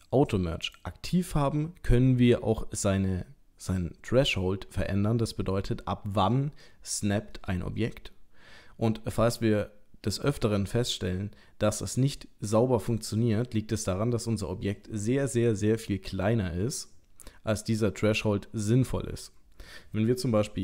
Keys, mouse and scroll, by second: 0.6 click.